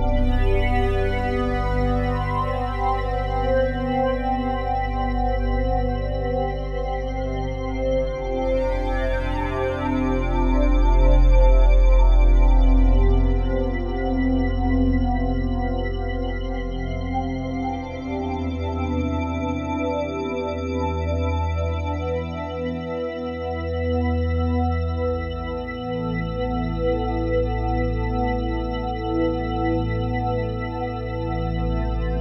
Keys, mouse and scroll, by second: 0.8 typing, 1.8 typing, 3.5-3.8 typing, 4.3 click, 5.0-12.5 drag, 13.4 typing, 17.9-21.4 drag, 18.7 typing, 21.4-22.8 typing, 22.9-23.3 ctrl+alt+drag, 23.6-26.7 alt+shift+drag, 27.7 click, 30.0-32.2 drag.